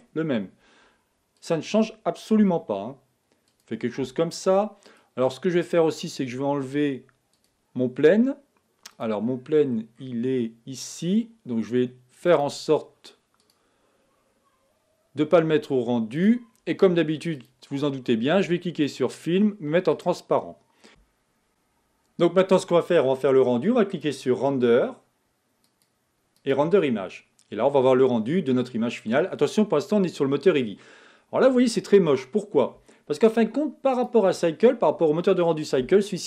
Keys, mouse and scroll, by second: 1.5 click, 2.6 g, 5.2 click, 16.6 click, 20.1 click.